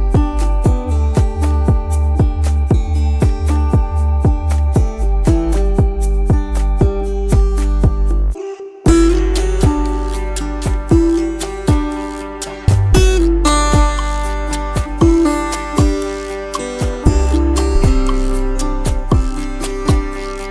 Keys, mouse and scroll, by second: 4.9 space, 6.8 alt+scroll down 1, 9.1 space, 12.2 t, 13.1 ctrl+a, 13.5-15.8 typing.